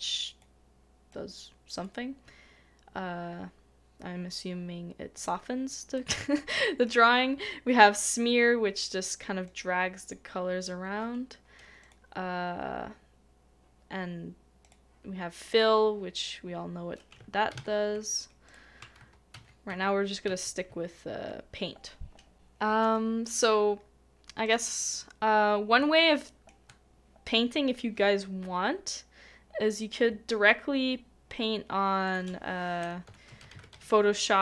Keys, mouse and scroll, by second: 5.9 middle click, 17.2 middle click, 17.5 ctrl+z, 19.0 ctrl+z, 25.7 ctrl+z, 25.8 shift+middle click.